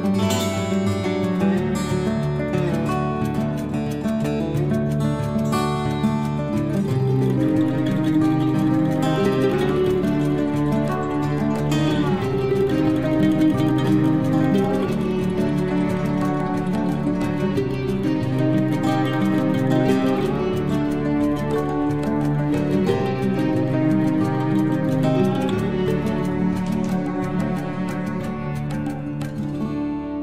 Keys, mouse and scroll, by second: 0.4 space, 0.9 l, 1.2 scroll up 1, 2.0 click, 5.7-6.1 scroll up 1, 6.1 click, 8.4 space, 8.8 click, 9.9 Delete, 10.1 scroll down 1, 11.9 click, 13.0 Delete, 13.8-15.6 scroll up 1, 16.6 scroll up 1, 23.4 t, 23.5 scroll up 1, 25.2 click, 25.5 click, 26.9-29.2 typing, 29.5 Return.